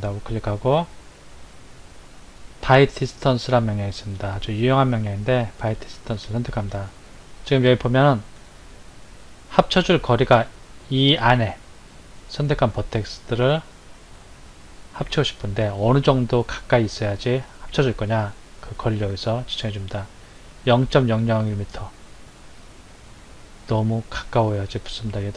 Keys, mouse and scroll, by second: 25.0-25.3 drag.